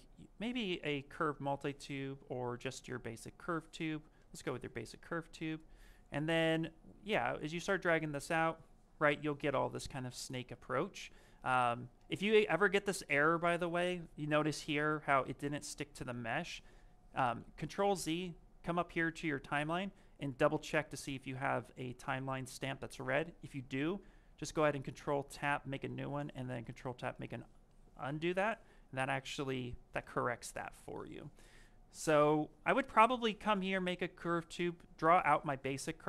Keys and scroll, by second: 4.9 s.